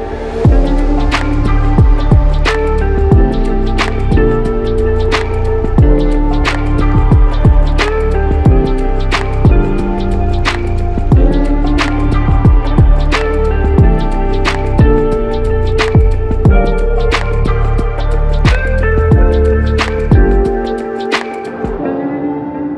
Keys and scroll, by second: 0.0-0.6 typing, 9.5-11.3 typing, 21.2-21.9 typing.